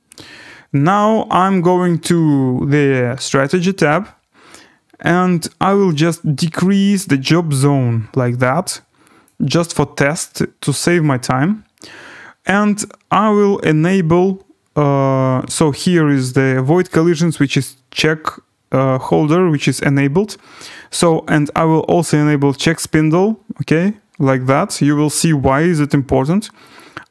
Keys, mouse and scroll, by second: 0.4 scroll, 1.6 right click, 3.4 click, 9.2 click, 12.2-14.3 scroll, 15.8 click, 16.7 scroll, 17.5-18.9 scroll, 19.2-19.8 scroll, 22.6 click, 23.4-24.2 scroll, 24.5 scroll, 26.8 click.